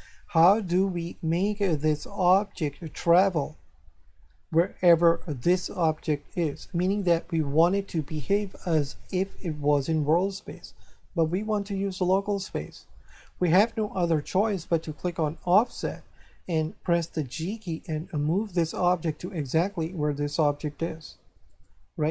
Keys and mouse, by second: 7.6 click, 11.2 click, 13.2 click, 15.3 click, 17.4 g, 21.5 click.